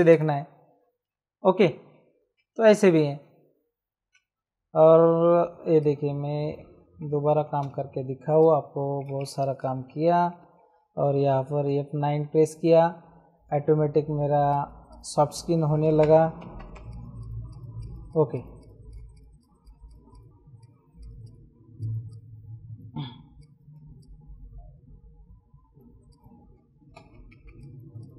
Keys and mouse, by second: 2.3 ctrl+d, 5.3 m, 5.7 click, 7.3 ctrl+t, 8.3 shift+click, 9.1 Return, 9.6 ctrl+shift+e, 11.5 F8, 14.5 click, 16.0 KP_0, 16.8 click, 18.7 space, 18.8 click, 19.7 space, 20.1 click, 20.9 space, 21.2 click, 22.9 space, 23.3 click, 23.9 click, 25.8 space, 26.0 click, 27.5 click.